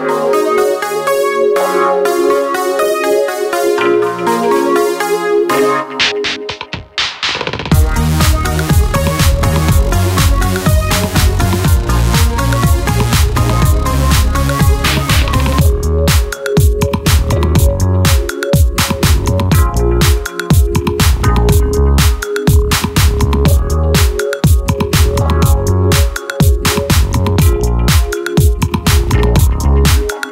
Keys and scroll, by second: 21.3 super+Home, 22.7 super+End, 23.3 super+Page_Down, 24.4 super+Page_Up, 25.1 super+Page_Up, 26.1 super+Page_Up, 27.3 super+Home.